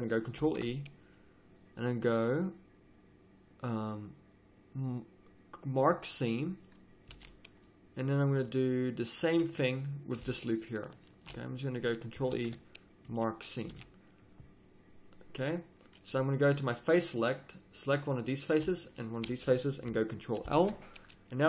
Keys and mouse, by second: 0.4 ctrl+e, 6.3 middle click, 7.1 a, 7.9-9.1 middle drag, 10.4-12.3 middle drag, 12.3 ctrl+e, 13.7 a, 16.5 click, 16.8-18.5 middle drag, 20.4 ctrl+l.